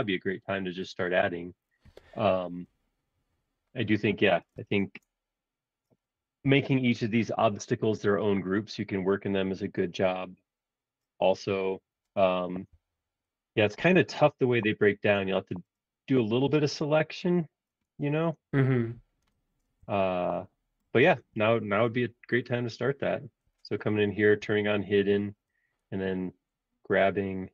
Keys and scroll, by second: 4.9 super+Tab, 12.4 super+=, 12.7 super+=, 12.9 super+=, 17.9 super+Tab, 24.4 shift+g.